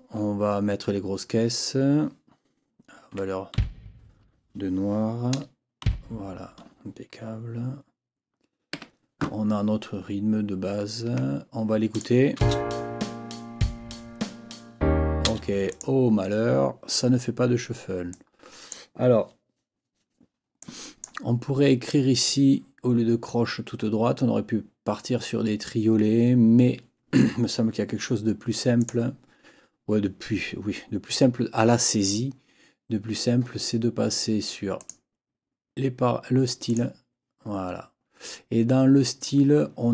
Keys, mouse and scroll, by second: 3.1 KP_5, 3.5 b, 5.3 KP_0, 5.8 b, 8.7 Escape, 10.8 ctrl+scroll down 2, 11.9 click, 12.4 space, 15.7 click, 18.1 click, 20.6 click, 28.8 click, 34.8 click, 36.7 click.